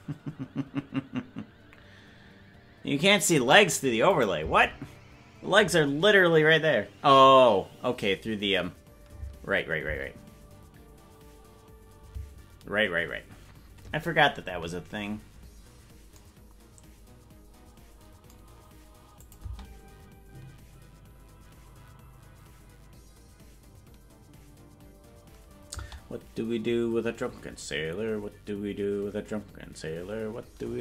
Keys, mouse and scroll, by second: 4.2 click, 4.4 space, 9.4 space, 10.2 space, 12.2 space, 19.3-20.4 drag, 19.4 space.